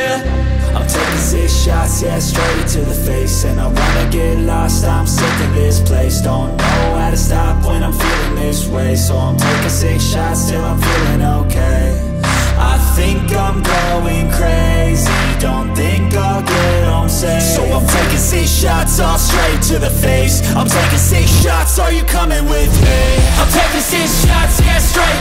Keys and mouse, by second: 4.1-9.5 drag, 11.6 g, 21.7 Escape.